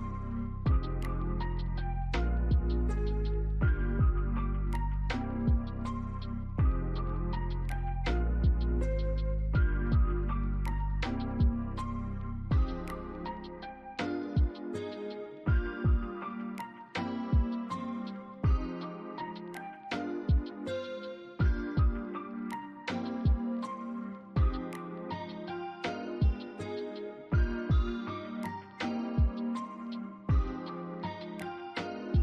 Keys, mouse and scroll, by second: 8.7 scroll up 1, 9.0 alt+middle click, 11.4 scroll up 1, 11.8 alt+middle click, 13.1 BackSpace, 13.6-14.1 scroll down 1, 14.1 alt+middle click, 14.9 alt+middle click, 16.0 alt+scroll up 1, 28.5 scroll down 1, 28.8 alt+middle click, 29.5 alt+scroll up 1, 30.3 alt+middle click.